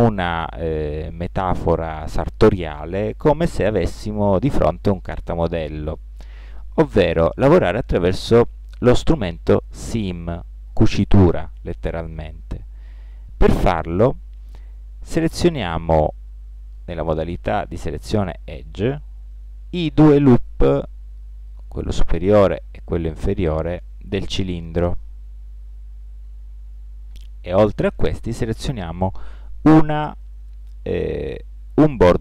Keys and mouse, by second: 15.3 ctrl+Tab, 21.3 middle click, 25.3 z, 30.4 click, 31.1 middle click.